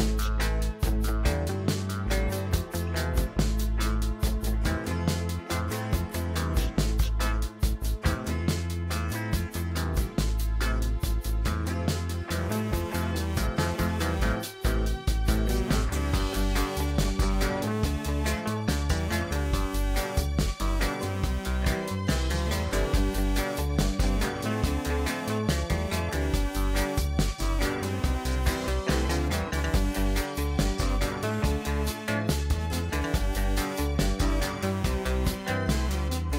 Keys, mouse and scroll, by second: 2.0-4.5 drag, 6.4 click, 7.4-9.9 middle drag, 9.9 click, 10.6 Tab, 11.2 click, 12.5 click, 13.1-15.6 drag, 17.0-19.5 drag, 22.2-23.1 middle drag, 23.1-23.5 scroll up 3, 23.5-25.7 middle drag, 25.7-26.3 scroll down 2, 26.3-27.4 shift+middle drag, 27.4 click, 28.0 click, 28.5-29.1 middle drag, 29.1-29.7 scroll up 4, 29.8 shift+middle click, 30.4-31.2 scroll up 1, 31.2 click, 32.3 Tab, 33.5 2, 34.0 click, 36.0 alt+shift+click.